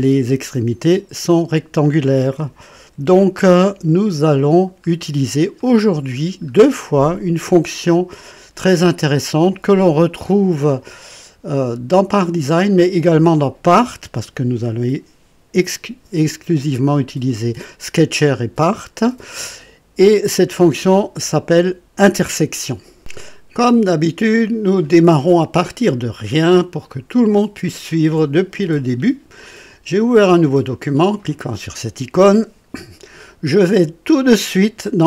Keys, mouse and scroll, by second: 2.8 &, 3.4-4.8 drag, 4.9-5.3 scroll down 1, 5.6 right click, 6.2 scroll down 1, 6.8 right click, 12.2 click, 13.7 click, 26.8 click, 34.1 click.